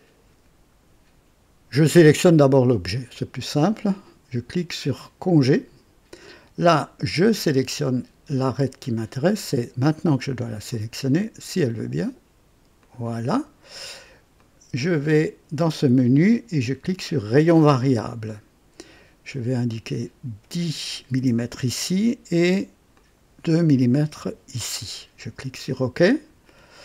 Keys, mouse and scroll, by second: 2.2 click, 2.9 click, 5.5 click, 9.3 click, 10.5 click, 11.1 click, 12.7 click, 14.3 click, 17.3 click, 19.7 click, 21.1 KP_0, 22.9 click, 24.2 KP_2, 26.1 click.